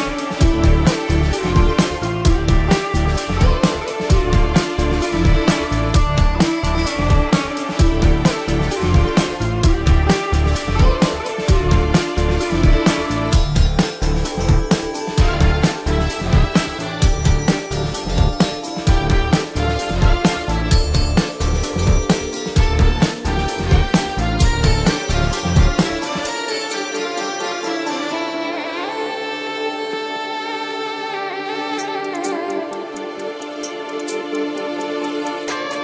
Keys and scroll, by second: 9.5 ctrl+=, 11.1 ], 18.3 ctrl+alt+z, 19.9 ctrl+alt+z, 20.2 ctrl+alt+z, 22.9 ctrl+alt+z, 23.2 ctrl+alt+z, 23.8 ctrl+alt+z, 25.4 ctrl+alt+z, 26.0 ctrl+-, 28.2 space, 28.6 ctrl+-, 29.4 space, 31.9 ctrl+alt+z.